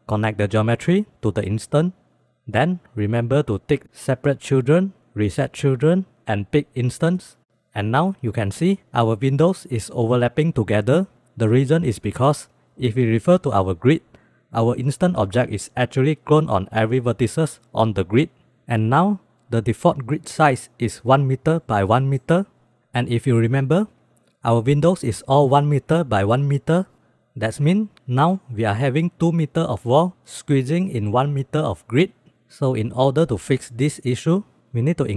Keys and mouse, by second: 0.3-2.1 drag, 2.6-3.1 middle drag, 3.8 click, 5.4 click, 6.1 middle click, 6.8 click, 18.9-19.2 middle drag, 23.2 shift+middle drag, 23.8 shift+b, 27.4 click, 34.7-35.1 drag.